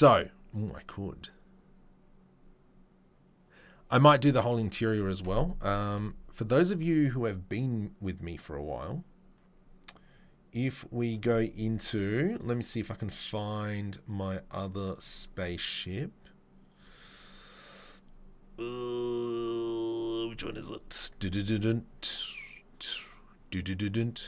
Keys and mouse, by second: 6.2 ctrl+s.